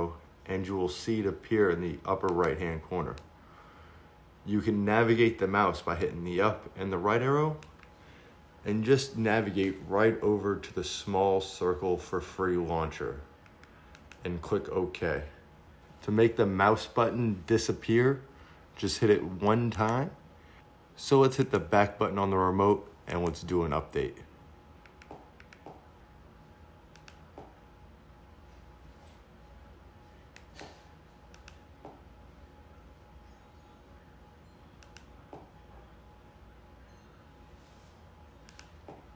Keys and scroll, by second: 0.0 Up, 8.7 Left, 14.1 Return, 24.8 Left, 35.8 Return.